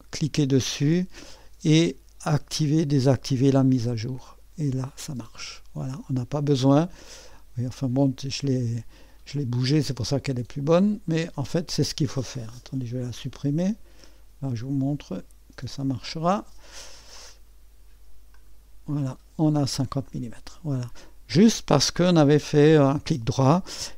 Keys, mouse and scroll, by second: 0.7 click, 3.7 click, 7.3-9.0 drag, 11.1 click, 12.7 Delete, 16.0 click, 18.3 click, 20.0-21.1 drag.